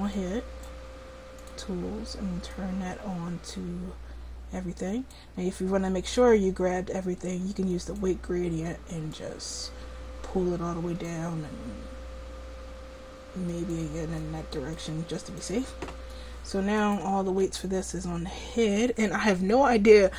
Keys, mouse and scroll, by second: 0.2 click, 0.7 right click, 1.2-4.3 drag, 7.7-9.5 right drag, 13.5-15.5 drag, 17.3 r.